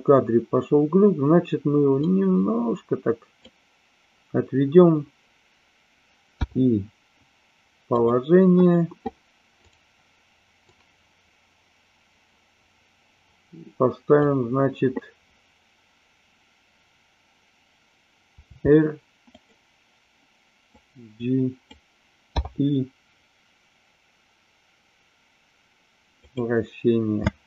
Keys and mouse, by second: 2.0-3.4 drag, 9.7 click, 10.7-14.3 drag, 18.4 r, 19.3 click, 20.7-21.7 drag, 27.2 space.